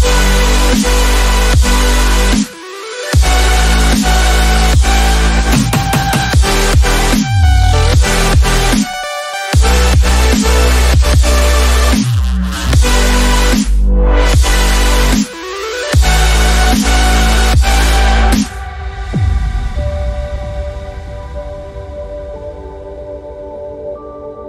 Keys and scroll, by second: 3.7-4.0 typing, 4.6 Up, 4.8 Up, 5.0 Up, 5.3 Up, 5.4 Up, 5.5 Up, 5.6 Up, 5.7 Up, 5.8 Up, 5.9 Up, 6.4 Left, 6.6 Left, 6.7-7.1 Left, 7.4 Left, 15.1 ctrl+d, 16.0 Down, 16.7 Down, 17.1 Down, 21.7 ctrl+o.